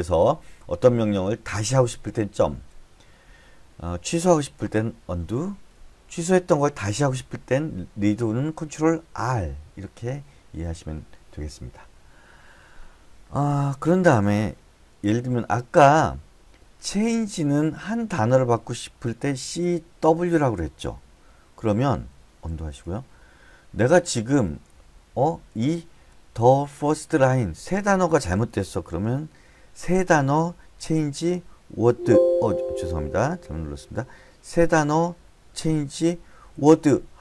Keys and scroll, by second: 15.5 k, 15.8 k, 17.4 typing, 18.5 typing, 19.8-20.6 typing, 21.7 Escape, 22.9 u, 24.3-26.3 typing, 30.3-32.2 typing, 34.9-36.9 typing.